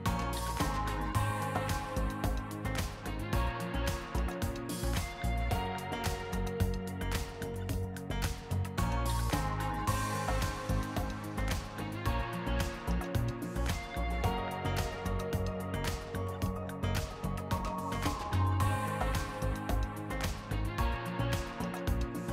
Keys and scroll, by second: 0.4 Return, 5.9 0, 6.1 Right, 6.9 5, 7.4 Return, 8.9 b, 9.8 BackSpace, 11.2-12.1 typing, 12.5 Return, 16.1 r, 22.1 r.